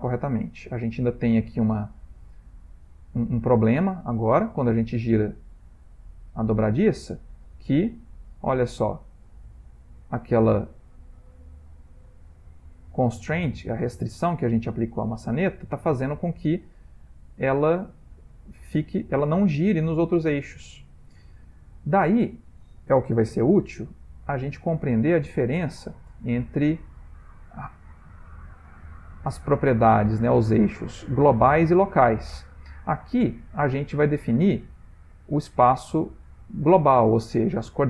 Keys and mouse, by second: 5.1 middle click, 5.8 ctrl+middle click, 6.3 middle click, 6.8 r, 9.0 middle click, 9.4 middle click, 9.5 middle click, 9.9 r, 13.1 shift+middle click, 13.4 shift+middle click, 13.5 shift+middle click, 16.1 r, 23.5 alt+r, 24.7 middle click, 25.6 shift+middle click, 26.2 ctrl+middle click, 28.8 shift+middle click, 29.6 ctrl+middle click, 37.4 ctrl+middle click.